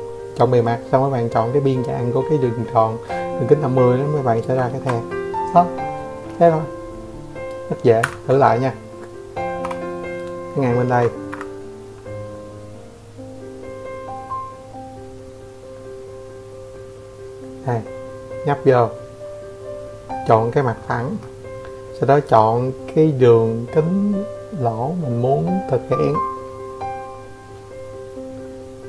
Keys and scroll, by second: 2.3 ctrl+1, 5.5 Escape, 7.2 e, 8.4 Escape, 8.9 Escape.